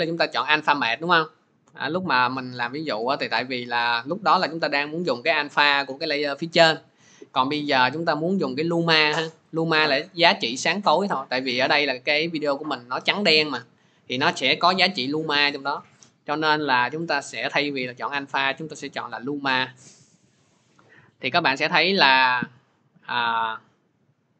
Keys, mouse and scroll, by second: 2.8 click, 12.7-24.3 drag.